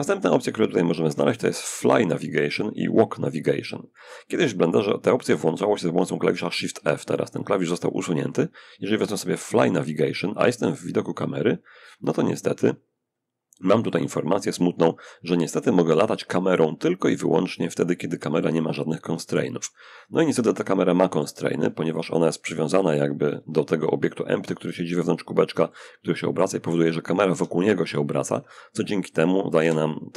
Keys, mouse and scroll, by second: 9.1 click, 17.6-22.1 middle drag, 23.5 space, 24.9-26.2 middle drag, 27.5 Escape, 28.9 0, 29.5 space.